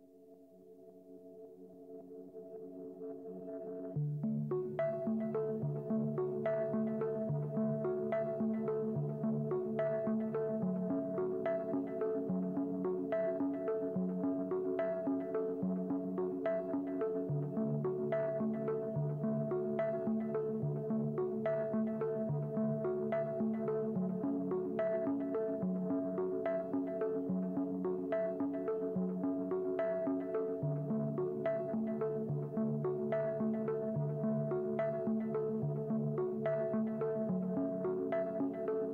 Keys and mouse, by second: 0.1 Delete, 0.1 shift+a, 0.8 s, 1.7 Tab, 3.1 Tab, 3.3 ctrl+a, 4.5 click, 5.5 click, 8.1 click, 9.2 Tab, 9.3 click, 10.1 click, 10.4 Tab, 10.6 middle click, 11.2 click, 11.5-12.7 drag, 13.1-14.0 drag, 14.9-15.5 drag, 16.0 click, 17.1 click, 17.1 middle click, 17.4-18.0 drag, 18.0-19.2 middle drag, 19.2 click, 19.8 shift+middle click, 20.2 click, 20.7-21.8 middle drag, 23.0 shift+middle click, 23.2-23.7 middle drag, 24.0 shift+middle drag, 25.9-26.6 drag, 26.8 click, 27.7 shift+a, 28.9 KP_0, 29.2 n, 30.3 click, 30.5 n, 31.2-31.6 shift+middle drag, 31.7 middle click, 31.9 shift+middle click, 32.5 ctrl+middle click, 32.8 shift+middle click, 33.2 r, 35.0 shift+middle click, 35.6 click, 35.9 click, 37.1-37.5 ctrl+drag, 38.0-38.9 typing.